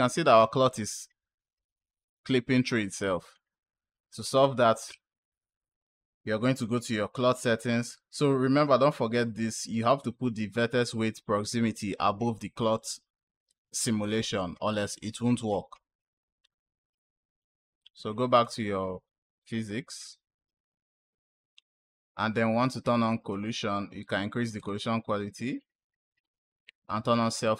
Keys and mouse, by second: 1.1-3.2 drag, 18.2 click, 19.8 click, 22.7 click, 24.4 click, 25.6 click, 27.2 click.